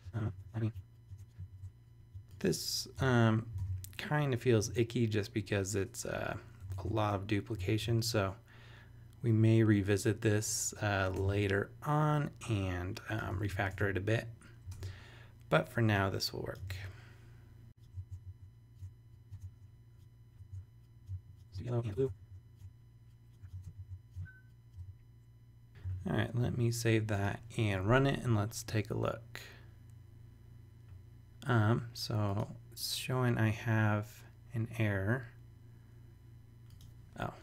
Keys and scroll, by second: 0.3 super+Tab, 0.7 super+Tab, 1.0 super+v, 1.1 super+Tab, 1.6 super+Tab, 2.0 super+c, 3.0 Return, 3.5 super+Return, 3.6 super+v, 6.7 super+Tab, 7.5 shift+super+Tab, 7.7 shift+super+e, 11.2 super+Tab, 13.3 super+v, 13.7 super+Tab, 16.7 super+c, 17.8 super+Return, 18.0 super+Tab, 18.3 shift+super+e, 18.7 super+Tab, 19.3 super+Tab, 20.3 ⟲, 20.4 super+Tab, 21.1 super+c, 21.4 Return, 21.7 super+v, 21.8 Return, 22.0 super+Tab, 22.2 shift+super+e, 22.5 super+Tab, 23.5 super+Tab, 23.8 shift+super+e, 24.1 super+Tab, 24.7 super+v, 26.4 super+s.